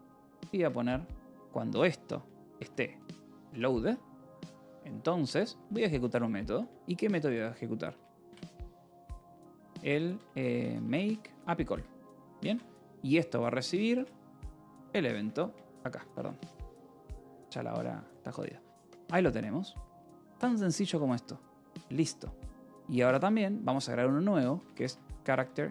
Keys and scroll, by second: 0.0-0.8 typing, 2.2-12.9 typing, 11.6 Escape, 14.3-16.6 typing, 16.9 Escape, 17.7-18.8 typing, 19.0 Escape, 20.8 k, 21.4 j, 22.3 o, 23.0 [, 24.2-25.7 typing.